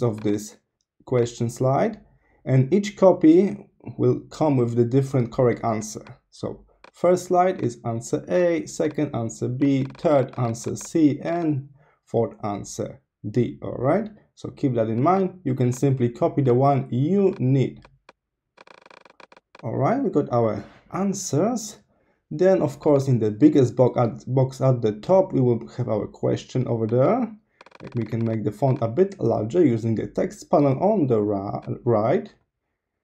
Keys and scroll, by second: 2.1-4.5 typing, 8.9 super+a, 12.0-13.5 typing, 23.3-25.7 typing.